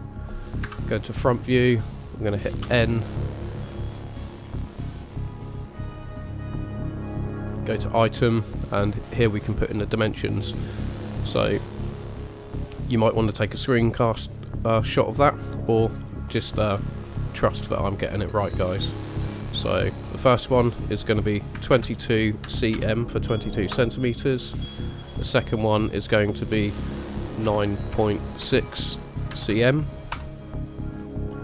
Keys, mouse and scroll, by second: 0.6 KP_1, 2.9 n, 4.0-7.2 scroll up 13, 7.2 click, 7.2-8.8 scroll up 1, 18.9 click, 21.7 KP_2, 24.9 click.